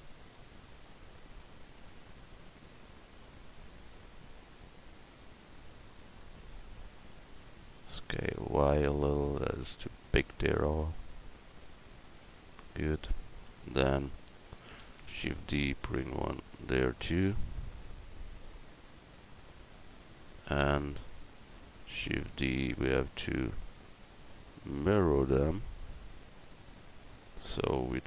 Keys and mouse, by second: 1.8-3.7 middle drag, 5.0-7.7 drag, 7.7 s, 10.8 click, 14.8 shift+d, 22.0 shift+d.